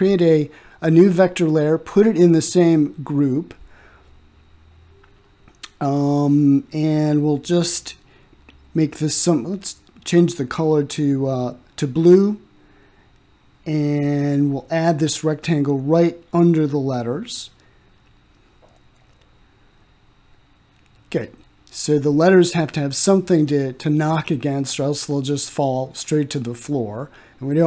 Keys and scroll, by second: 4.2 s.